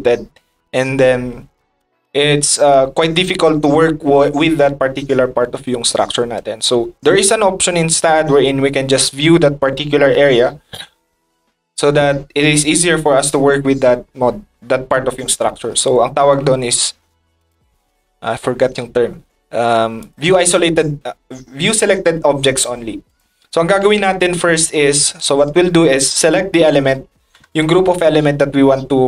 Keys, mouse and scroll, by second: 6.0 middle click, 10.6 drag, 15.3 middle click, 17.4 click, 20.0 click, 22.6 middle drag.